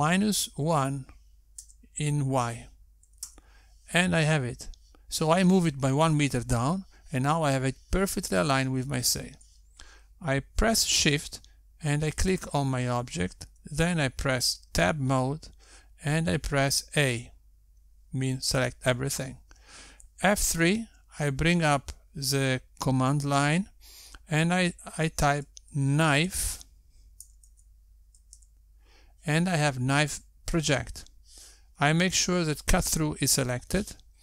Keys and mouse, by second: 13.8 shift+click, 16.0 Tab, 18.5 a, 21.9 F3, 28.9 BackSpace, 34.0 click.